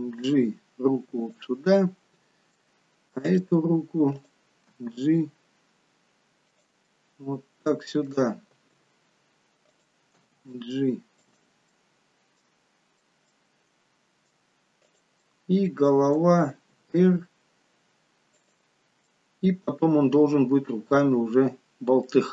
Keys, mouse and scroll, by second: 1.9 middle click, 3.3 click, 4.2 click, 4.8 g, 6.9 middle click, 8.5 r, 10.1 g, 11.8 middle click, 13.5 middle click, 14.8 click, 15.2 middle click, 16.5 r, 19.0 middle click, 21.7-22.1 scroll down 2, 22.1 middle click.